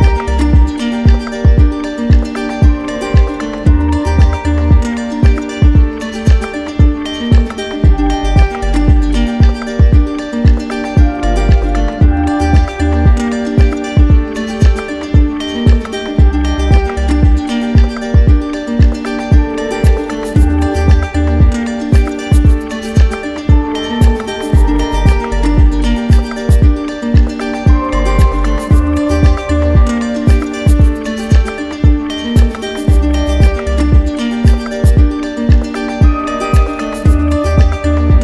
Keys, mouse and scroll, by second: 2.1 click, 4.7 right click, 5.3 shift+right click, 6.9 shift+right click, 7.2 right click, 8.2 right click, 9.5-11.2 drag, 11.2-12.2 right drag, 13.0 click, 14.7 click, 15.9 click, 16.5 ctrl+z, 17.7 click, 17.9 ctrl+z, 18.6 right click, 19.4 click, 20.0 click, 20.4 click, 21.4 click, 23.0 click, 24.2 right click, 25.8 click, 26.5 right click, 27.5 click, 28.4 click, 29.4 click, 30.7 click, 31.4 right click, 32.6 click, 33.5 right click, 34.8 right click, 36.3 click, 36.9 click, 37.9 right click.